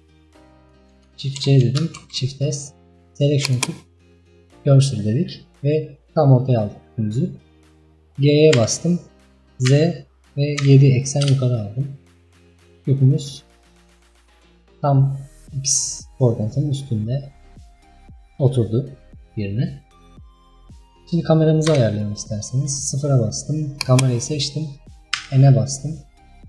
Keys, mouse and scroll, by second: 1.5 shift+c, 2.1 shift+s, 4.3-5.5 scroll down 3, 8.6 g, 12.0 scroll up 2, 12.4-12.8 scroll down 4, 12.8 scroll up 3, 13.6-14.2 scroll up 3, 14.2-14.7 scroll down 2, 14.7-16.1 scroll up 4, 16.9-17.4 scroll up 3, 17.4-18.8 scroll down 7, 19.4-20.2 scroll down 1, 20.4-21.5 scroll down 1, 21.5-21.8 scroll down 1, 21.8 KP_0, 23.8 click, 25.4 n.